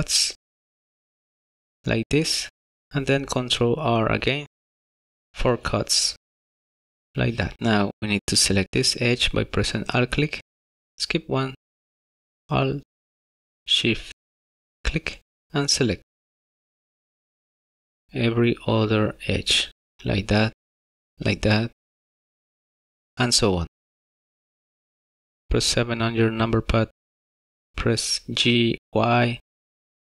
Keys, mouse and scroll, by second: 3.2 ctrl+r, 8.6 alt+click, 13.0 alt+shift+click, 14.5 alt+shift+click, 16.0 alt+shift+click, 17.6 alt+shift+click, 19.0 alt+shift+click, 20.4 alt+shift+click, 21.9 alt+shift+click, 23.6 alt+shift+click, 24.0 alt+shift+click, 24.5 alt+shift+click, 25.8 KP_7, 28.2 g.